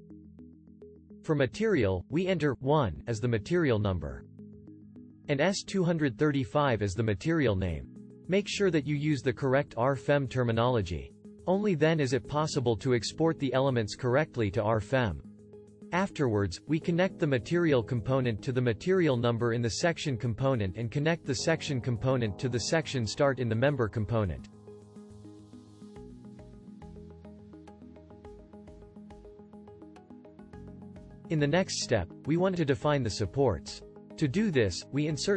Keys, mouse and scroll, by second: 25.0-27.3 middle drag, 27.6-29.0 right drag.